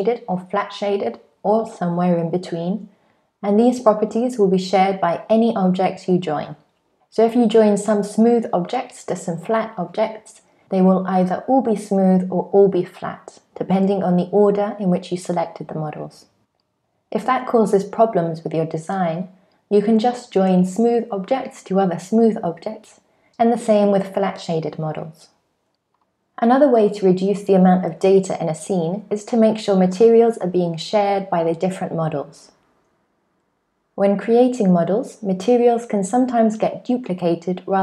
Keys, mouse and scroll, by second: 3.2 click, 4.8 shift+click, 5.7 shift+click, 6.6 super+z, 6.6 click, 7.1 shift+click, 8.0 super+j, 9.2 click, 9.6 shift+click, 10.4 super+j, 11.7 click, 13.3 right click, 14.6 click, 15.2 click, 16.0 shift+click, 16.2 shift+click, 17.2 shift+click, 18.0 super+j, 18.8 click, 19.7 shift+click, 21.4 super+j, 23.4 shift+click, 25.4 super+j, 26.1 shift+middle click, 26.1 shift+scroll up 1, 28.9 click, 32.5 click, 34.4-36.2 scroll down 4, 36.2 scroll up 1, 37.2 click.